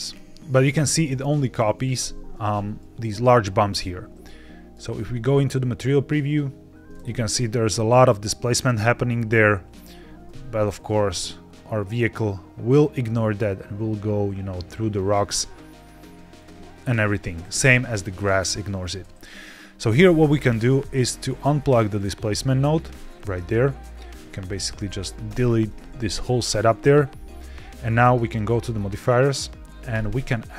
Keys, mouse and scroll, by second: 0.0 g, 0.2 z, 0.4 middle click, 1.9 ctrl+s, 3.6 z, 7.0-10.0 middle drag, 10.0 g, 10.1 y, 16.3 drag, 16.6 ctrl+Tab, 18.7 click, 19.6-21.8 scroll down 3, 19.9-21.8 middle drag, 21.8 click, 23.7 drag, 24.3 shift+click, 25.2 x, 25.9 middle click, 28.2 click, 29.8-30.5 drag.